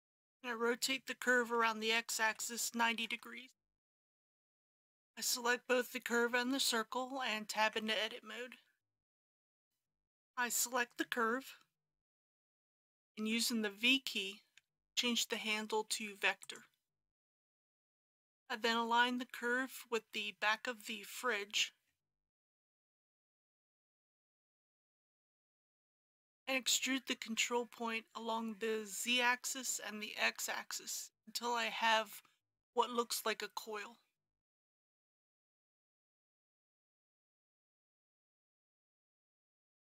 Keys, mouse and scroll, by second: 1.6 r, 2.3 x, 2.9 KP_9, 3.1 KP_0, 7.6 Tab, 9.7 alt+a, 12.3 l, 12.7 middle click, 14.6 v, 16.4 click, 17.8 KP_1, 20.0 g, 21.8 z, 25.3 click, 35.3 e, 36.0 z, 37.9 KP_Decimal, 38.7 KP_3.